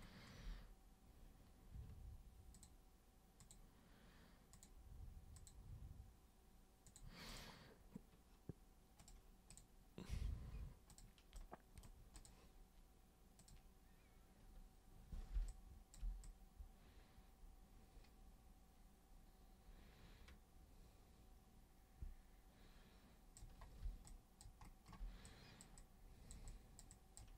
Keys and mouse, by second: 2.5 super+click, 3.4 super+click, 4.5 super+click, 5.4 super+click, 6.8 super+click, 7.3 super+click, 9.0 super+click, 9.5 super+click, 10.9 super+click, 11.4 super+right click, 12.1 super+click, 13.4 super+click, 15.3 super+b, 15.5 click, 16.2-23.3 super+drag, 24.0 alt+super+click, 25.2 click, 25.7 click, 26.5 click, 26.9 click.